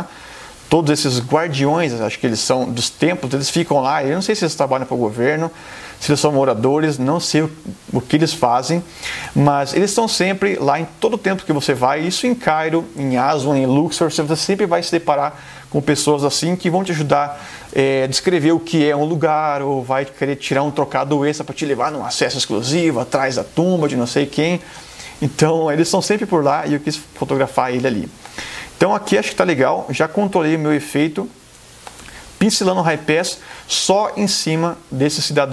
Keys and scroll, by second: 1.6 space, 9.4 space, 26.2 space, 31.7 space.